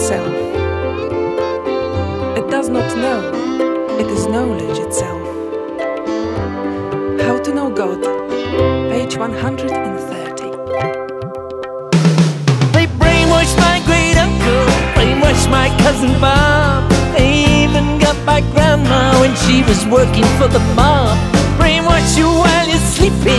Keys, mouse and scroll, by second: 5.7 click, 8.2 click, 9.8 click, 10.7 click, 11.7 click, 13.1 click, 13.9 click, 15.2-17.2 drag, 17.8 click, 19.7 click, 21.4-23.3 drag.